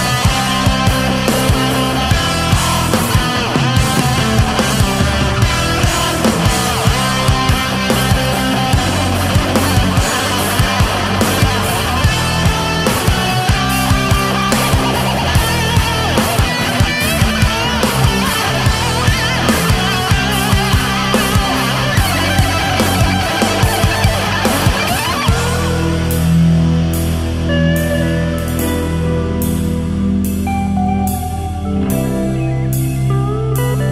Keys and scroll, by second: 1.0 ctrl+z, 2.4 ctrl+z, 6.1 ctrl+z, 6.2 space, 11.7 ctrl+z, 11.9 ctrl+z, 12.5 ctrl+z, 13.5 ctrl+z, 14.7 space, 16.0 space, 17.4 ctrl+z, 18.0 ctrl+z, 19.0 space, 19.2 space, 19.4 ctrl+z, 20.1 space, 21.0 ctrl+z, 21.3 ctrl+z, 22.2 ctrl+z, 22.4 ctrl+z, 22.8 ctrl+z, 23.1 ctrl+z, 23.4 space, 24.7 space, 25.0 ctrl+z, 25.2 ctrl+z, 28.3 ctrl+z, 29.2 ctrl+z, 31.4 ctrl+z, 32.1 space, 32.5 ctrl+z.